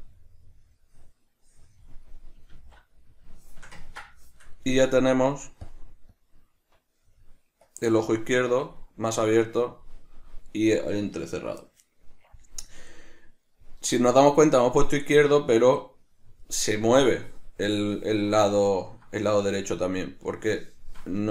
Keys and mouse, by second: 2.5 alt+q, 3.4-4.6 shift+middle drag, 4.8 click, 6.1-7.9 drag, 8.7 click, 9.3-18.6 drag, 18.6-21.3 ctrl+middle drag, 21.2 Tab.